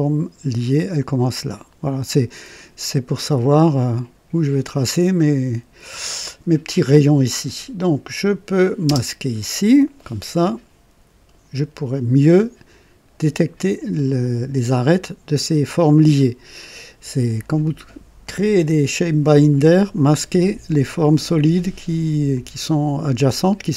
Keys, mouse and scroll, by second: 8.8 space, 22.2-23.7 drag.